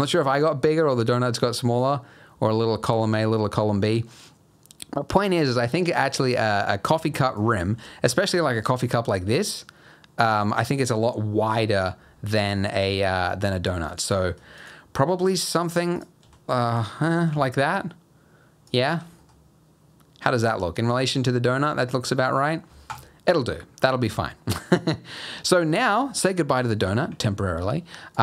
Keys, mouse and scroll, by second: 1.6 click, 6.9 s, 7.7 g, 12.4 middle click, 12.8 g, 14.2 s, 15.1 g, 16.2 s, 17.1 g, 18.9 g, 23.7-25.6 scroll up 1, 25.6 middle click, 26.5 click, 28.1 click.